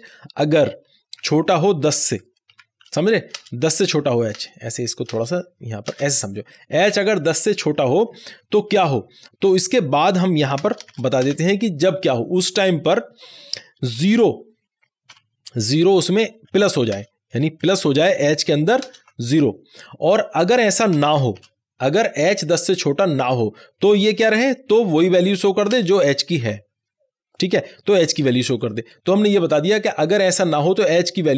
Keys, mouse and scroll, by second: 0.9-5.8 typing, 3.7 Left, 4.5 Left, 5.3 Left, 7.6 Right, 10.5 space, 10.8 shift+/, 11.2 space, 13.9 shift+space, 14.0 shift+', 15.0 0, 16.3 Right, 16.8 space, 17.6 shift+=, 18.8 space, 19.0 h, 20.8 space, 21.3 shift+;, 25.7 space, 26.4 h, 28.6 ;.